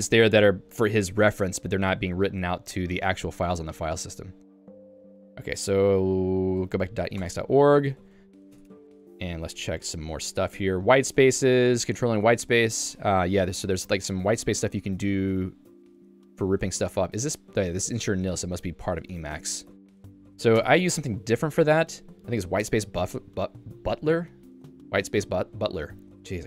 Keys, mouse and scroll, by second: 7.3 Return, 8.6 Escape, 9.1 j, 9.5 ctrl+d, 9.6 ctrl+d, 10.5 h, 11.0 Home, 11.2 Tab, 11.8 j, 13.5-15.7 typing, 17.6-19.6 typing, 21.4 Return.